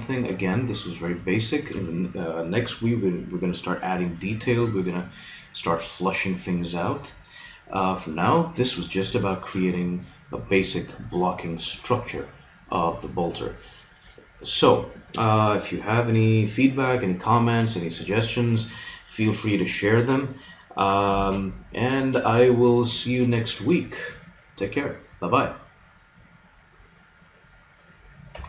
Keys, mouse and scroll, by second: 1.3-3.7 middle drag, 4.5-8.8 middle drag.